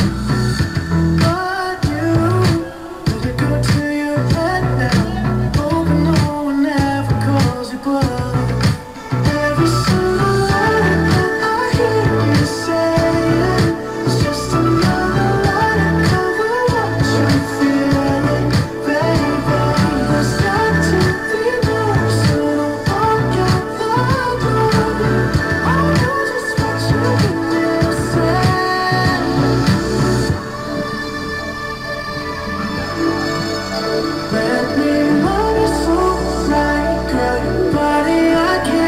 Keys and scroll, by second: 7.7 ctrl+j, 30.5 b, 33.5 ].